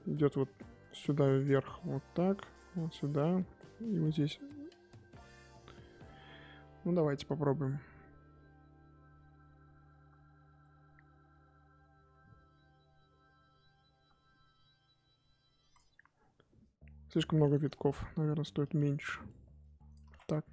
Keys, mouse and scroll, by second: 7.6-17.8 drag, 17.8 ctrl+z, 18.9-20.0 drag, 20.0 ctrl+z.